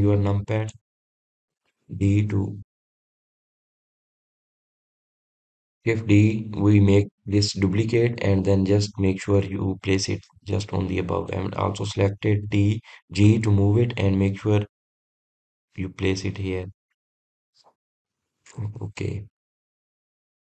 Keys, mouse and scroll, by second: 0.9 KP_3, 2.2 drag, 12.9 drag, 18.9 drag, 19.3-19.7 scroll down 3, 19.7-20.4 middle drag.